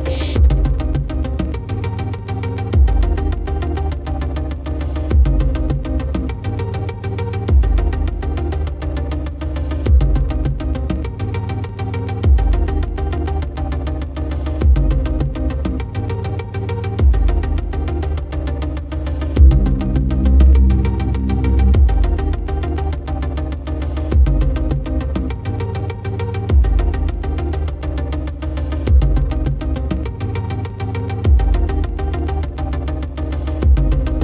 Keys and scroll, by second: 3.2 ctrl+=, 17.5 ctrl+-, 18.3 ctrl+0.